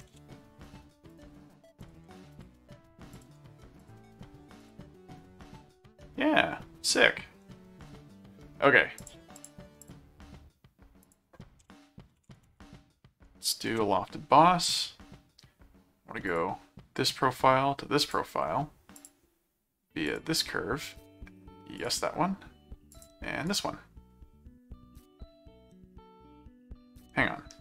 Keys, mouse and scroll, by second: 0.1 ctrl+alt+a, 0.6 click, 1.8 ctrl+alt+click, 2.1 ctrl+alt+a, 3.1 ctrl+click, 3.8 ctrl+alt+click, 4.1 ctrl+alt+a, 4.6 click, 6.0-7.2 middle drag, 9.0 click, 11.0 click, 11.8-12.9 typing, 13.7 Return, 16.3 click, 18.0 click, 19.0 click, 20.0 click, 21.8 click, 22.9 click, 23.5 right click, 24.9-27.6 middle drag.